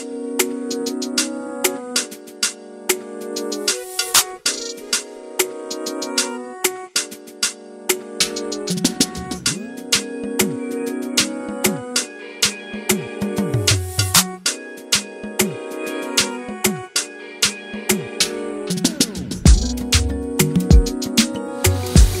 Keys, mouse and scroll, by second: 0.7 click, 1.4 Tab, 1.6 alt+a, 1.6-2.0 scroll down 5, 2.0-2.4 middle drag, 2.4-3.0 scroll down 1, 3.0 scroll up 2, 3.2 click, 3.4 Tab, 4.0 ctrl+KP_Add, 4.2 scroll up 2, 4.3 middle click, 4.6 click, 5.0 3, 5.6 ctrl+KP_Add, 5.7 ctrl+KP_Add, 6.3 ctrl+KP_Add, 6.6 click, 7.7-8.3 scroll down 4, 7.8 Tab, 7.9 alt+a, 8.1 shift+middle click, 8.3 middle click, 8.6 shift+middle click, 8.7 scroll up 1, 8.8 middle click, 9.3 scroll up 1, 9.3 shift+middle click, 9.5 click, 9.7 KP_1, 10.1 Tab, 10.4 alt+z, 10.6 click, 11.0 alt+z, 11.2 click, 12.0 click, 12.4 alt+z, 12.6 click, 13.1 alt+z, 13.4 click, 14.3 Tab, 14.4 alt+a, 14.4 scroll down 10, 14.7 shift+middle click, 14.8-15.5 scroll up 4, 15.0 click, 15.3 shift+middle click, 15.5 middle click, 16.2 scroll up 1, 16.3 click, 16.4 shift+middle click, 16.8 scroll down 1, 17.1 KP_1, 17.3 scroll up 1, 17.4-17.8 middle drag, 17.8 scroll down 1, 17.9 Tab, 18.0 shift+middle click, 18.1 scroll up 1, 18.1 middle click, 18.4 click, 18.7 right click, 19.4 middle click, 19.7 a, 19.8 scroll down 1, 19.9 middle click, 20.7 click, 21.1 KP_Decimal, 21.3-21.7 scroll down 7, 21.7 shift+middle click, 21.8-22.2 scroll up 3, 21.9 middle click.